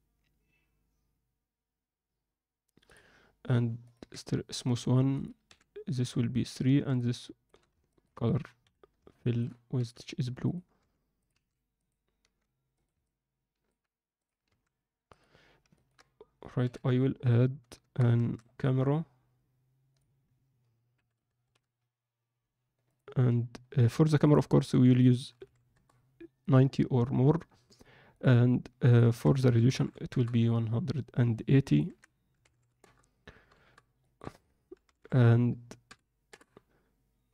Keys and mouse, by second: 3.9 click, 5.4 click, 6.4 click, 7.8 ctrl+middle click, 8.6 KP_1, 9.2 alt+shift+middle click, 9.7 g, 10.8 r, 11.3 s, 12.2 g, 13.0-13.6 alt+middle drag, 14.4 s, 15.7 ctrl+middle click, 18.3 shift+a, 20.9 KP_7, 21.2 ctrl+alt+KP_0, 22.9-24.0 drag, 24.2 click, 24.9 click, 28.8-30.1 drag, 29.7 0, 31.7-33.5 drag, 32.5 0, 34.0-36.3 drag, 35.0 0.